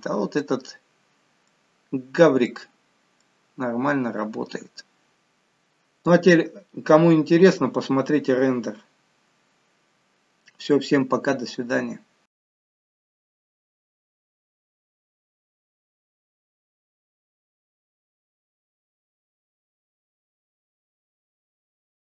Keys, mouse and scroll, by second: 0.7-1.5 scroll up 1, 1.5 middle click, 1.5-2.6 scroll up 3, 2.6-3.2 scroll down 1, 3.2 middle click, 3.2 scroll down 1.